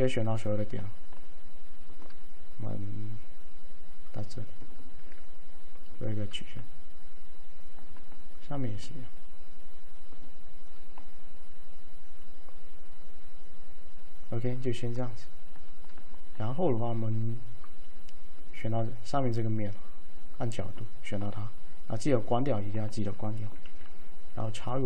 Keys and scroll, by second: 23.8 alt+a.